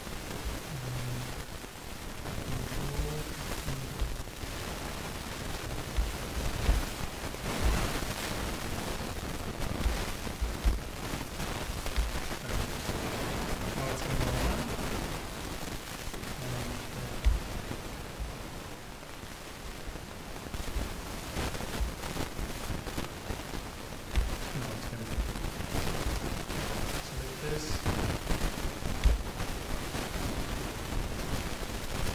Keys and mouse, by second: 4.0 super+KP_0, 6.0 KP_0, 6.7 KP_0, 10.7 KP_0, 12.0 ctrl+KP_0, 15.1-16.7 drag, 17.3 ctrl+KP_0, 22.6 ctrl+o, 22.6-24.2 drag, 24.2 ctrl+KP_0, 26.9-28.7 drag, 29.1 ctrl+KP_0.